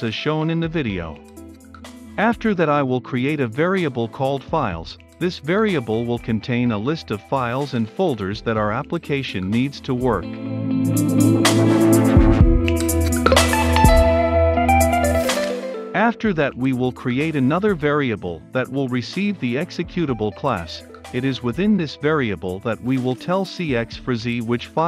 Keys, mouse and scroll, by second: 0.0-1.6 typing, 0.0 Return, 0.1 Return, 0.3 Return, 1.2 Return, 1.7 Return, 5.1 click, 6.0 Return, 6.1-9.0 typing, 9.2 Return, 10.2-13.9 drag, 13.9 Return, 15.2 t, 15.3 a, 15.6 r, 16.9 click, 17.6 Return, 18.1-19.4 typing, 18.3 Caps_Lock, 18.8 click, 18.9 Return, 19.3 Return, 19.6 click, 20.1 Caps_Lock, 20.7 g, 21.2 e, 21.5 t, 22.9-24.8 typing, 24.4 Return.